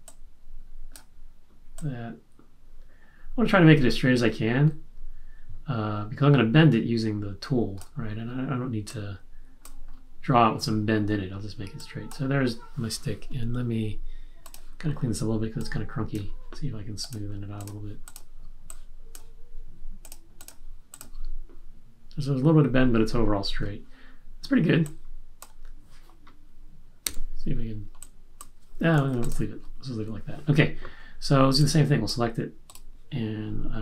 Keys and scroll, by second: 27.0 q, 28.9 super+z.